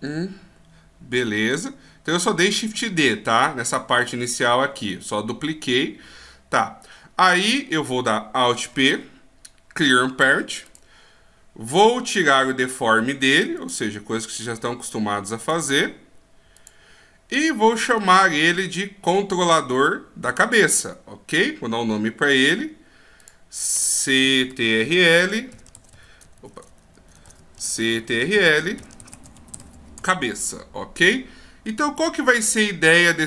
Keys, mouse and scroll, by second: 1.3 n, 8.7 alt+p, 13.5 click, 14.1-14.5 scroll down 6, 15.4 click, 15.4-16.5 scroll down 4, 16.5 click, 18.0 right click, 21.9-23.2 scroll up 8, 23.2 click, 26.4 BackSpace, 26.5 BackSpace, 26.8 BackSpace, 27.0 BackSpace, 31.6 middle click.